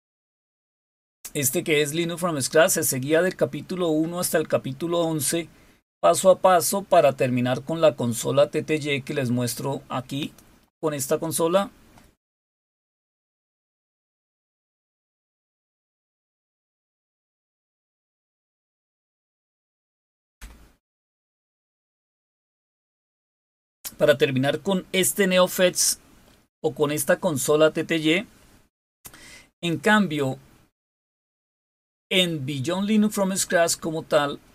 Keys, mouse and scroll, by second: 0.5-1.2 scroll down 2, 3.2-4.9 scroll down 4, 5.7-6.7 scroll down 5, 9.9 click, 31.6 click.